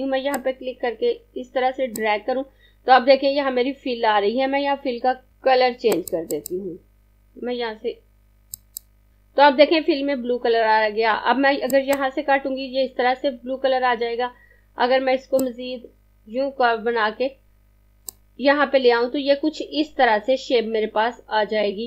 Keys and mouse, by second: 6.0 click, 11.8 click, 15.4 click.